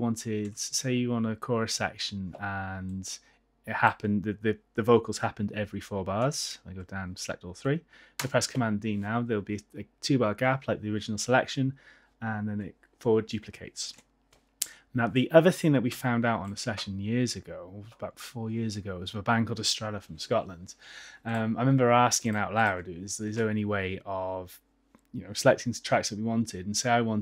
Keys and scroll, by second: 0.6 super+z, 8.3 super+d, 14.3 super+z, 16.0 F8.